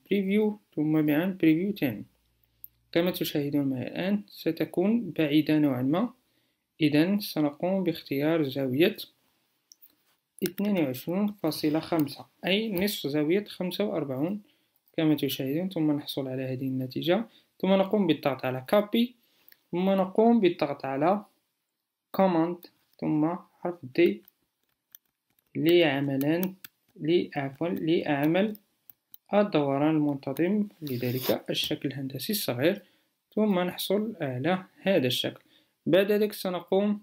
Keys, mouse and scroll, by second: 23.0 super+d.